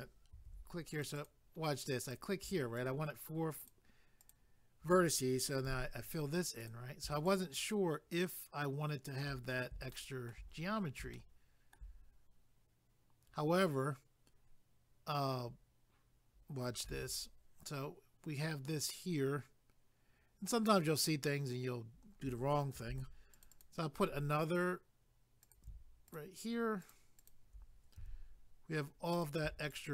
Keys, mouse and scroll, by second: 0.3 ctrl+r, 0.9 click, 1.1 click, 1.3 double click, 2.0 click, 5.6 f, 6.6 click, 7.2 shift+click, 9.9 shift+middle click, 10.5 scroll up 1, 11.1 shift+middle click, 12.5 scroll up 1, 22.8 ctrl+r, 23.3 click, 23.5 click, 23.6 double click, 25.4 click, 26.1 shift+click, 26.8 shift+click, 27.3 shift+double click, 28.0 f, 29.1 click, 29.7 shift+click.